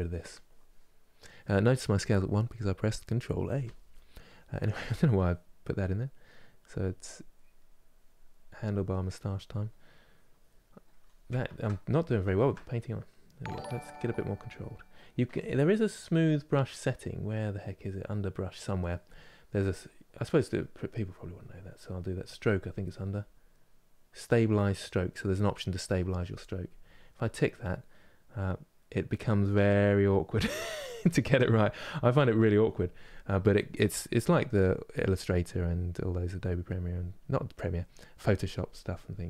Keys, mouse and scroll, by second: 3.2 n, 3.6 middle click, 4.3-8.9 drag, 8.9 middle click, 9.7-11.2 drag, 11.2 ctrl+z, 11.6-12.8 middle drag, 12.8-30.8 drag, 30.8 ctrl+z, 34.3 middle click, 35.0-39.2 drag.